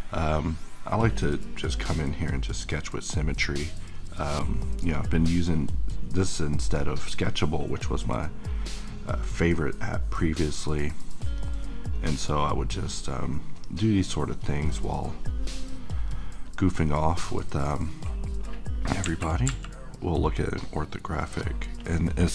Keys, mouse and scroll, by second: 0.5-9.5 drag, 11.0 middle click, 11.9 click, 17.0-22.3 middle drag.